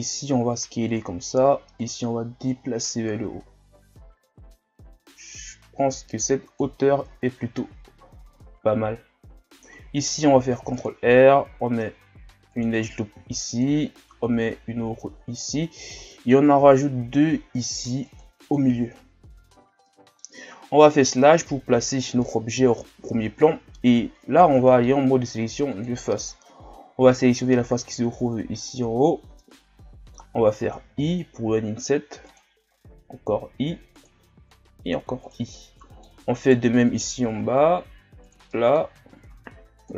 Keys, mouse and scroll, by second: 1.8-8.0 drag, 8.0 z, 8.5 scroll down 1, 9.4 scroll up 1, 10.2 scroll up 2, 10.4 ctrl+r, 13.2 ctrl+r, 16.0 ctrl+r, 18.9 scroll down 2, 19.9-20.9 middle drag, 20.9 KP_Divide, 21.8 scroll down 3, 22.2 middle click, 22.6 scroll up 2, 24.5 ctrl+Tab, 26.2 right click, 27.9-31.0 middle drag, 31.0 i, 32.8 i, 34.5 i, 35.6 middle click, 36.4 right click, 37.3 i, 38.5 middle click, 39.1 i.